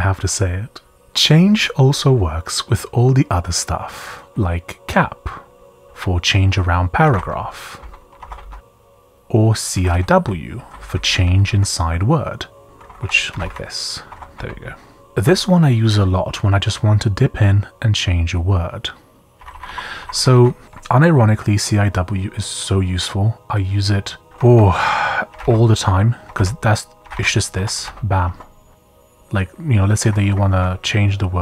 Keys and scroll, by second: 0.9-1.7 typing, 4.6-11.4 typing, 12.6-14.3 typing, 14.1 Escape, 16.4 typing, 19.3-20.3 typing, 21.4 typing, 24.3-28.8 typing, 30.0-31.4 typing.